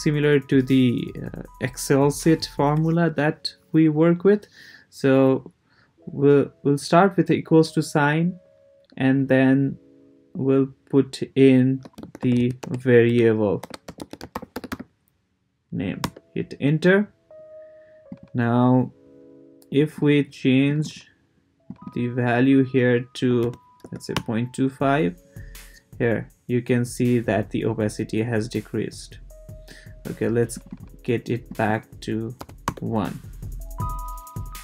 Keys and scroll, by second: 11.6-15.2 typing, 16.0 Return, 23.0-24.3 typing, 32.4 1, 32.6 Return.